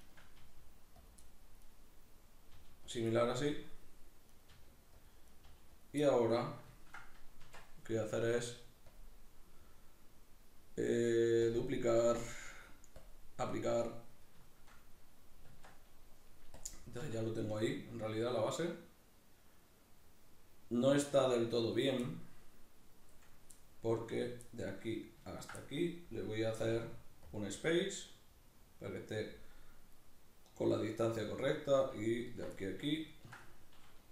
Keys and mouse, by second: 0.0 shift+right click, 0.4 g, 1.1 click, 1.2 middle click, 1.6 right click, 2.1 middle click, 2.6 g, 3.0 click, 3.1-4.4 middle drag, 4.4 right click, 4.6 g, 5.1 click, 5.3 right click, 5.5 g, 5.9 click, 6.0-8.9 middle drag, 7.4 Tab, 8.9-14.5 drag, 14.5-16.6 shift+middle drag, 15.5 Tab, 16.6 click, 17.0-21.7 middle drag, 17.0 a, 21.7 right click, 22.1-25.3 middle drag, 25.3 ctrl+right click, 25.6-30.7 middle drag, 26.6 q, 30.7 right click, 31.1-32.3 middle drag, 32.3 ctrl+right click, 32.6-34.1 middle drag.